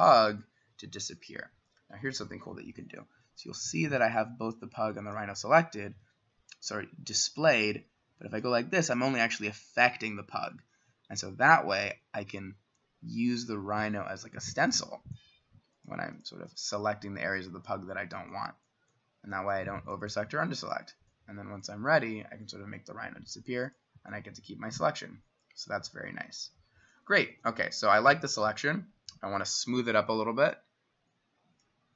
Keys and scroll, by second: 0.5 Escape, 1.2 s, 5.3 Escape, 5.9 s, 27.3 b.